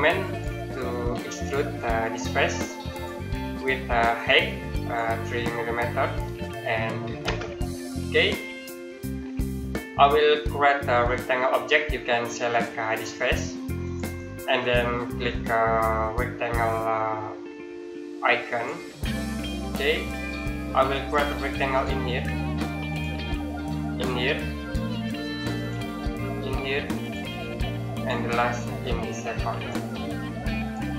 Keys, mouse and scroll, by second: 0.0 click, 1.4-2.7 scroll down 1, 2.7 click, 7.1 KP_Enter, 8.7 middle click, 13.7 click, 18.3 click, 19.4 middle click, 20.0 scroll down 1, 21.5 click.